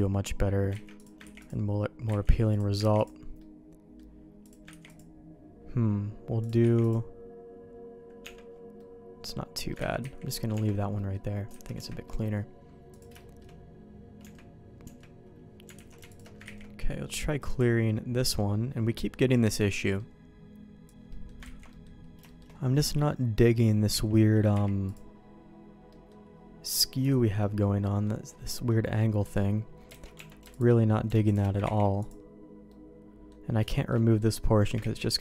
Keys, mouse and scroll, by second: 0.8 ctrl+z, 1.0 click, 1.4 ctrl+e, 2.2 ctrl+z, 2.5 click, 3.0 ctrl+e, 3.4 middle click, 4.4 click, 4.9 ctrl+e, 5.0-6.4 middle drag, 6.4 click, 6.8 ctrl+e, 6.9-9.7 middle drag, 8.2 Tab, 9.9 ctrl+z, 10.0 ctrl+z, 10.5 Tab, 10.9 middle click, 11.6 alt+a, 11.8 Tab, 12.0 middle click, 12.9 click, 13.2 shift+middle click, 14.2 Tab, 14.8 Tab, 15.7 alt+a, 16.1 alt+click, 16.4 ctrl+e, 18.2 middle click, 19.1 middle click, 19.8 middle click, 21.1 middle click, 21.6 ctrl+z, 21.7 middle click, 22.2 shift+middle click, 23.9 a, 24.5 u, 25.9 middle click, 27.1 shift+middle click, 27.6 middle click, 28.5 middle click, 29.2 middle click, 30.0 alt+a, 30.1 Tab, 30.5 alt+click, 31.2 alt+shift+click, 31.6 ctrl+e, 32.7 middle click, 33.7 shift+middle click, 34.1 middle click, 34.8 ctrl+z, 35.1 middle click.